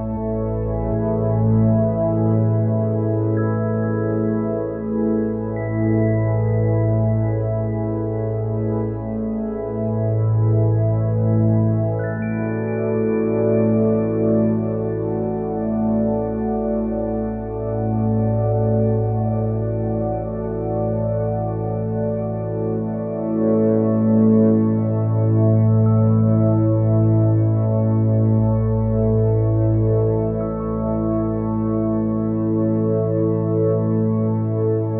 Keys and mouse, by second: 26.9 click, 29.6 click.